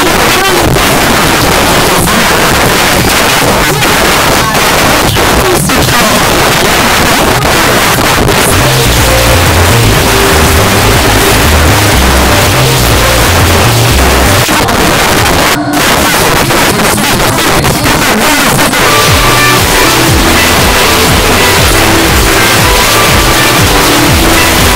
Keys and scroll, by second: 1.7 b, 1.9 Up, 2.3-2.7 Up, 2.9 Up, 3.1 Up, 3.1 Return, 14.4 Page_Down, 24.7 space.